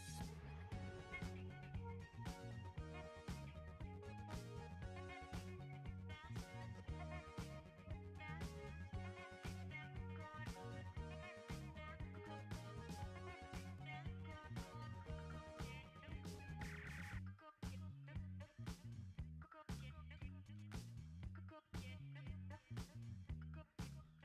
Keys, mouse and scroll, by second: 0.8-10.4 drag, 10.4-12.8 drag, 15.2 right click, 16.6 click.